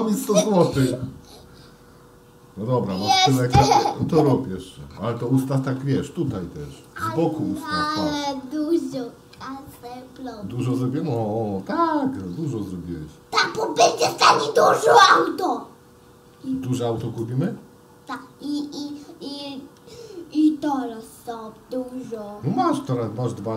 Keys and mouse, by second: 5.2 shift+d, 7.4-10.8 middle drag, 11.2-12.5 middle drag, 15.2 click, 16.5 g, 18.2 click, 19.3 g, 21.9 click, 22.7 f, 23.4 g.